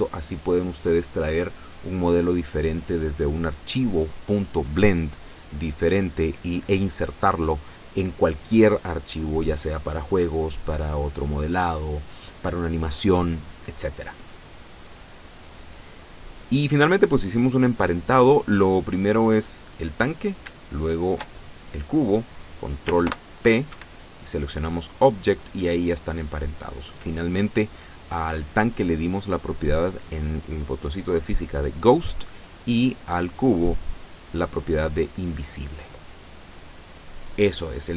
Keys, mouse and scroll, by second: 16.5 scroll down 2, 17.2-17.7 scroll up 2, 17.8 scroll down 2, 19.7 right click, 20.9 shift+right click, 23.1 ctrl+p, 23.7 ctrl+Escape, 26.0 right click, 28.5 middle click, 29.5 click, 32.5 right click.